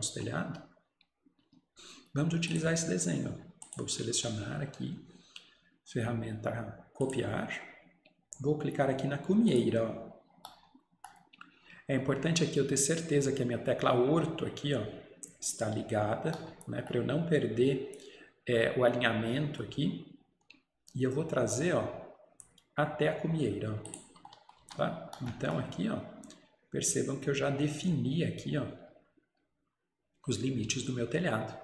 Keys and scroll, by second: 24.7 Escape.